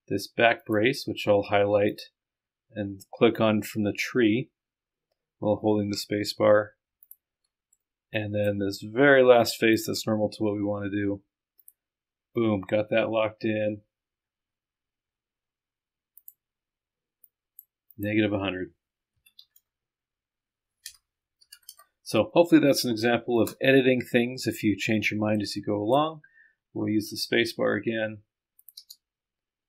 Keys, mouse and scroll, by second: 0.6 ctrl+click, 1.9 ctrl+click, 7.8 click, 9.8 ctrl+middle click, 11.6 middle click, 13.1-15.7 middle drag, 16.2 click, 17.3-18.5 drag, 19.8 KP_0, 24.2 middle click, 25.5 click, 28.9 space.